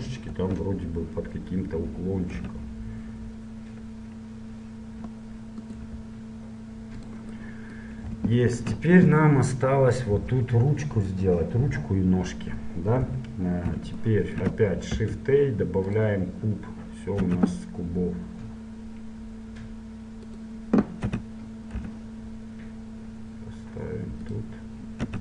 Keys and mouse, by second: 0.1 KP_1, 0.5 KP_3, 1.6-2.7 middle drag, 2.7 r, 6.2 g, 10.1-12.1 drag, 13.1 KP_7, 14.1-16.2 drag, 15.1 shift+a, 17.4 s, 21.2 z, 21.9 g.